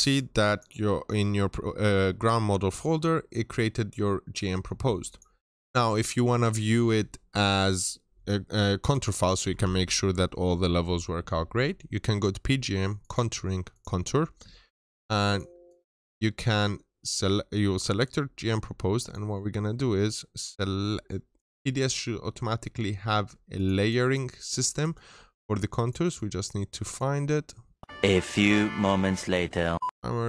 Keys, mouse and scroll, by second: 19.6-23.4 scroll down 1, 23.4 click, 23.7 double click, 25.6 click, 26.1 double click, 27.0 click, 28.7 double click, 29.9 click.